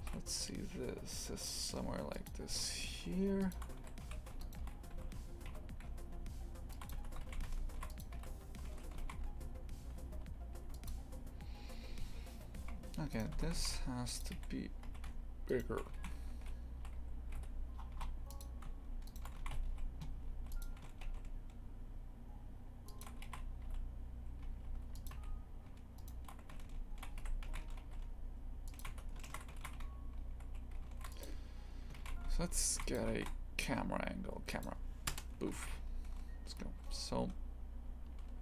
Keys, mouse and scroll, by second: 0.0 e, 4.0 a, 4.4 alt+shift+right click, 4.9 e, 6.9 Tab, 7.2 shift+f, 8.1 a, 9.0 shift+f, 13.1 right click, 13.3 Tab, 13.6 shift+f, 14.3 3, 14.8 a, 15.5 alt+shift+right click, 15.9 shift+f, 19.0 alt+shift+right click, 19.4 shift+f, 20.7 s, 23.2 shift+f, 25.1 a, 25.9 alt+shift+right click, 26.5 s, 27.4 s, 28.8 Tab, 29.6 shift+f, 32.0 shift+f, 34.6 shift+a, 35.1 KP_0, 35.5 shift+f.